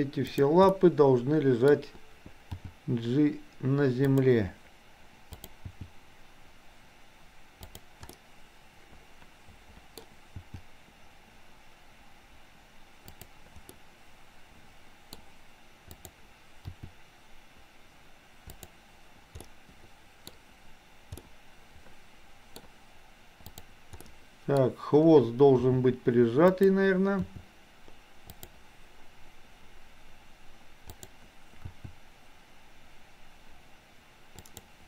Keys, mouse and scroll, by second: 0.6-1.8 middle drag, 2.6 g, 5.8 g, 8.1-10.0 middle drag, 10.4 g, 13.8-15.1 middle drag, 16.0 click, 16.8 r, 19.5-20.3 middle drag, 20.3-21.3 scroll up 1, 21.3-22.6 middle drag, 24.0-24.6 middle drag, 25.6 g, 27.3 r, 31.0 click, 31.6 r.